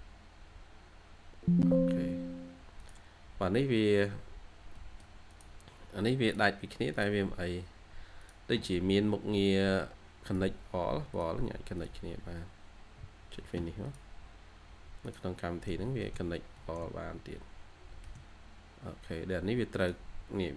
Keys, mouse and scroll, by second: 3.4-4.6 scroll up 1, 4.6 middle click, 5.0-6.0 scroll down 1, 15.2 scroll down 1, 15.6 middle click, 16.2 scroll down 1, 16.3 scroll up 1, 16.4 middle click, 18.1 scroll down 1, 18.3 scroll up 1, 20.3-20.5 scroll down 1.